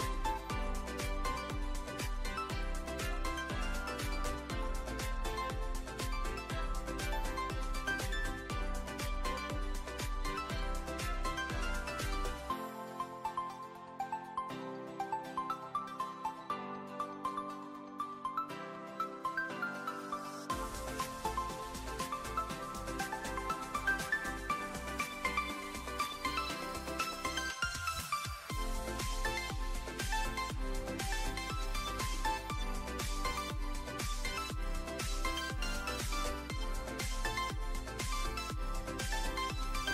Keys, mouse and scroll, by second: 0.5 ctrl+a, 0.7 Tab, 1.2 ctrl+r, 6.2 ctrl+z, 7.1 click, 9.1 shift+d, 10.8 p, 11.4 Tab, 12.5 click, 13.8 `, 15.2 s, 16.7 click, 17.2 `, 18.7 alt+z, 19.8-21.6 drag, 22.3 click, 23.4 shift+middle click, 24.6-25.1 middle drag, 25.4 Tab, 25.9 a, 27.9 alt+z, 28.1 shift+middle click, 33.3 a, 34.0 e, 34.3 z, 36.1 e, 37.2 click, 37.5 s, 39.3 e, 39.5 s.